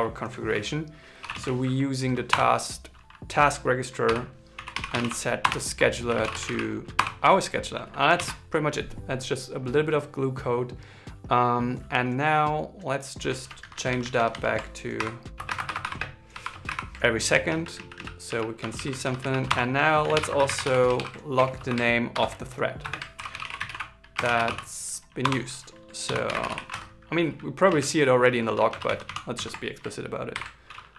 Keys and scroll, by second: 7.9 super+s, 14.7-16.4 typing, 20.7 shift+9, 21.9 shift+0, 22.9 shift+t, 28.4 alt+Left, 29.1 alt+Right, 30.1 shift+4.